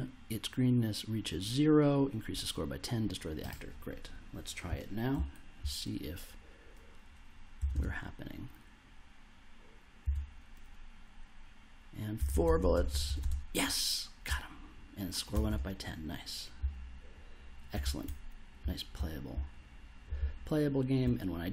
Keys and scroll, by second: 5.1 s, 7.5 space, 10.0 space, 12.2 space, 14.2 w, 15.3 space, 17.8 w, 18.6 s, 20.1 w.